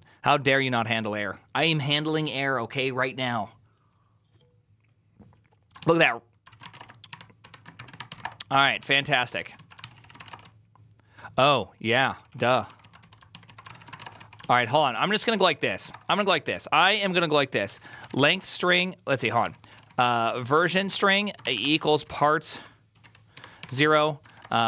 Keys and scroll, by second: 5.6 ctrl+a, 5.8-16.2 typing, 9.0 ctrl+c, 9.4 Return, 9.4 ctrl+u, 9.7 ctrl+c, 13.2 ctrl+a, 17.3-24.6 typing.